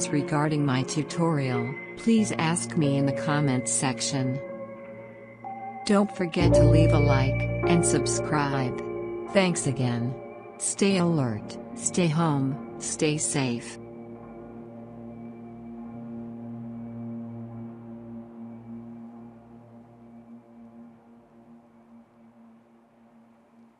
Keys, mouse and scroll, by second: 1.4 click.